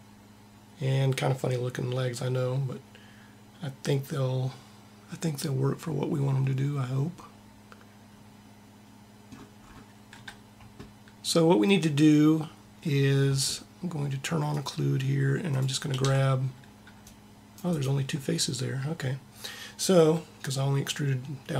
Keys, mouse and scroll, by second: 10.5-11.5 middle drag, 14.3 click, 15.8 c, 17.3 click.